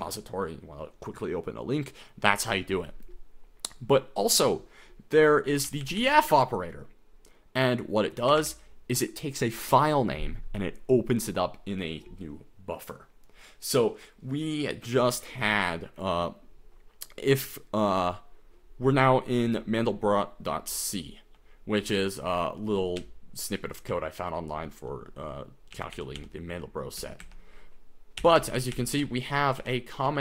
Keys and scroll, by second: 5.5-6.0 typing, 8.1-8.9 typing, 20.9-30.2 typing.